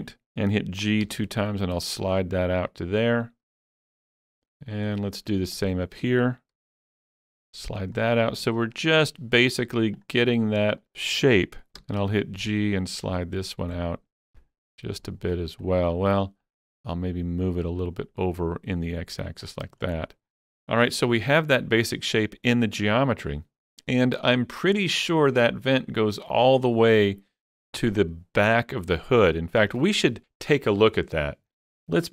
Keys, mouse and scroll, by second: 1.1 click, 1.1 shift+middle click, 1.1 g, 4.0 click, 4.4 shift+middle click, 5.0 shift+middle click, 5.6 click, 6.6 g, 6.7 g, 7.9 click, 8.2 scroll down 2, 8.9 shift+middle click, 10.0 click, 11.8 shift+middle click, 11.8 click, 12.0 g, 12.1 g, 15.1 shift+middle click, 15.1 click, 15.1 shift+g, 15.6 click, 16.8-17.8 drag, 19.5 scroll down 4, 19.9 shift+middle click, 26.5 shift+middle click, 26.5 scroll down 1, 26.6 shift+middle click, 29.1-29.4 scroll down 2.